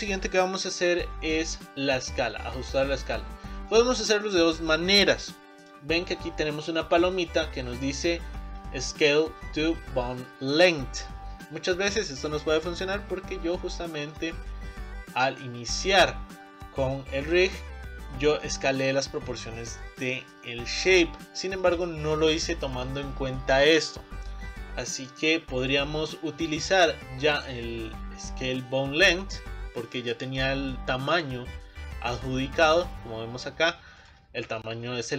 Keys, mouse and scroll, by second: 3.7-5.5 middle drag, 5.5-14.4 drag, 11.4-14.2 shift+middle drag, 17.6-21.7 middle drag, 25.6-28.6 drag, 30.0-32.2 middle drag, 32.2 click, 34.0-35.1 drag.